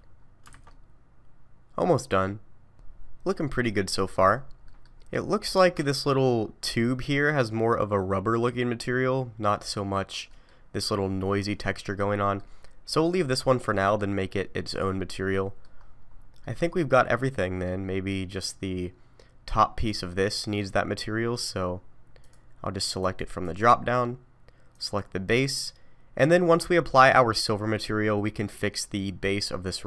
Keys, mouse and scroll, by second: 0.1 scroll down 3, 0.5 alt+a, 0.7 middle click, 4.4-4.7 scroll up 3, 4.7 middle click, 5.5 scroll up 2, 5.7 middle click, 10.3 middle click, 12.2 middle click, 13.0 click, 13.7 middle click, 14.7 click, 15.3 middle click, 15.8-16.2 scroll up 4, 16.4 middle click, 18.1 middle click, 19.8 click, 22.2 click, 23.0 click, 23.5 click, 27.5 middle click.